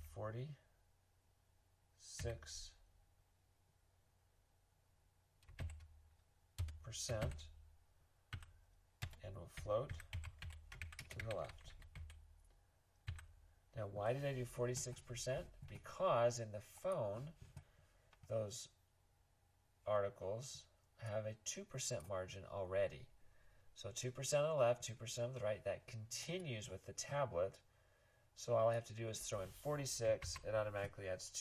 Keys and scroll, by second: 0.0-0.4 typing, 2.2 6, 5.6 shift+4, 6.5 BackSpace, 7.1 %, 8.8-13.6 typing, 30.2 super+s.